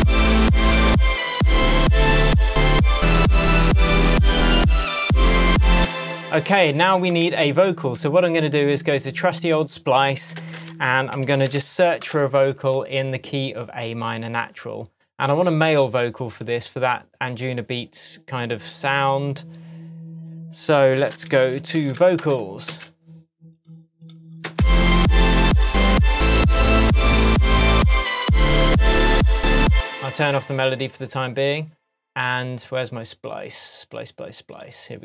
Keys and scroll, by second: 5.7 space, 7.2 super+s, 11.1 alt+s, 11.3 p, 12.0 Return, 21.3 alt+s, 21.4 p, 22.2 Return, 24.5 space, 29.7 space.